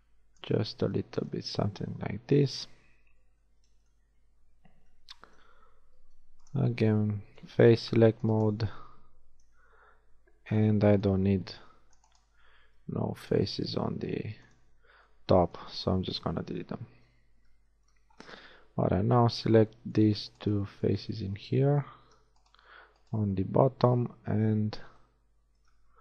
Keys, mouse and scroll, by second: 0.7 a, 4.0 z, 5.8 ctrl+Tab, 9.5 c, 12.8 c, 13.7 x, 17.0 KP_1, 20.6-22.0 middle drag, 24.1 KP_1.